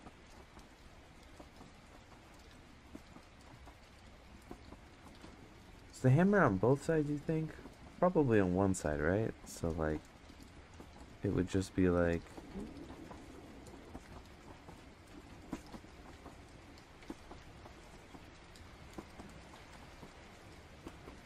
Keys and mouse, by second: 1.0 click, 2.0-12.9 drag, 13.6 click, 14.7-15.7 drag, 16.1 click, 17.2 click, 17.7 click, 19.8 click, 20.2 click, 21.1 click.